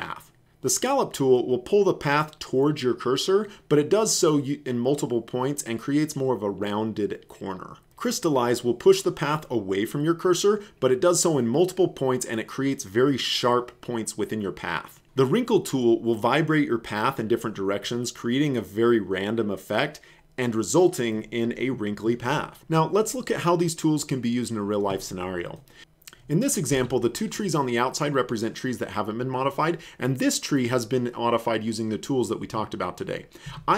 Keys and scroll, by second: 7.9 v.